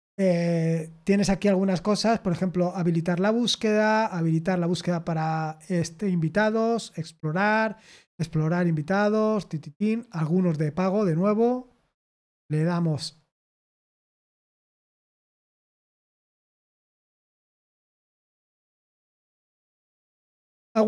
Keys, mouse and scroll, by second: 3.7-4.9 scroll down 1, 4.9-6.0 scroll down 1, 6.0-8.2 scroll down 1, 8.2-8.8 scroll down 1, 8.8-9.5 scroll down 1, 10.3-11.4 scroll down 6, 17.6 click.